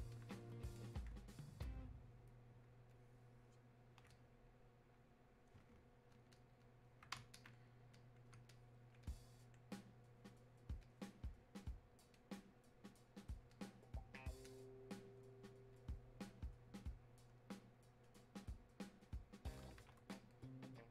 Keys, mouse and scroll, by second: 14.4-20.9 drag.